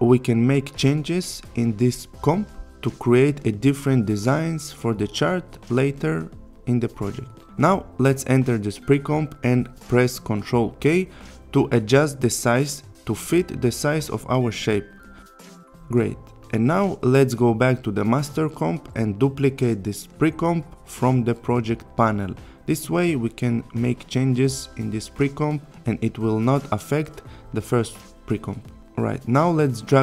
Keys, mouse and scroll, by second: 0.2 right click, 1.3 click, 3.2 1, 5.4 click, 7.6 click, 10.2 ctrl+k, 13.8 click, 16.4 click, 19.5 click, 21.9 click, 23.6 ctrl+d, 26.7-28.1 click.